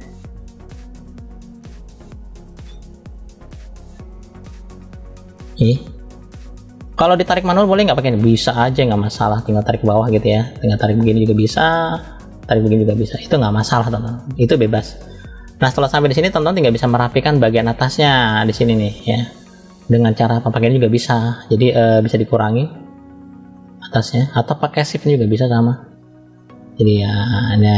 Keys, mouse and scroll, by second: 0.7 click, 1.9 click, 2.4-3.7 middle drag, 4.1 click, 5.1 middle click, 7.6 click, 10.2 click, 12.2 click, 13.7 scroll down 1, 14.3 middle click, 14.3 scroll down 1, 16.2 middle click, 17.1-17.4 scroll up 3, 19.1 scroll down 1, 20.1 click, 22.4 click, 23.4 middle click, 24.8 click, 25.7 middle click, 26.6 click.